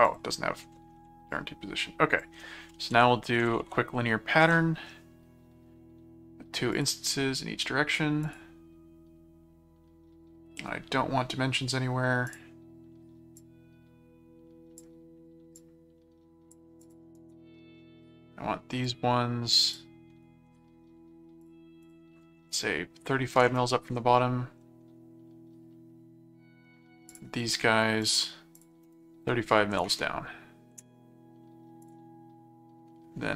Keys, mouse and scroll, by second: 0.0 click, 1.3 click, 2.7-4.1 typing, 4.4 Return, 6.7 click, 8.2 click, 12.3 click, 13.4 click, 15.6 click, 16.8 click, 17.1 right click, 18.8 click, 19.6 click, 21.4 click, 27.1 click, 28.0 click, 31.8 click.